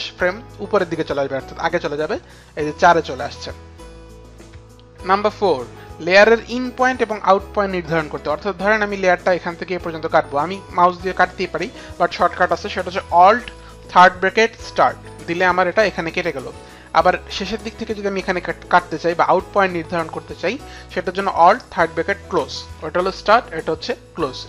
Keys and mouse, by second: 3.8 click, 5.2 click, 5.9 click, 16.5 click.